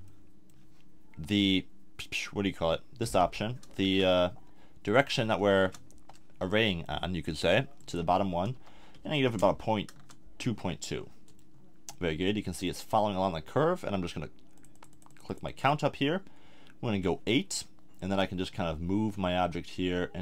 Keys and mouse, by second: 0.1-3.0 middle drag, 6.5-11.0 middle drag.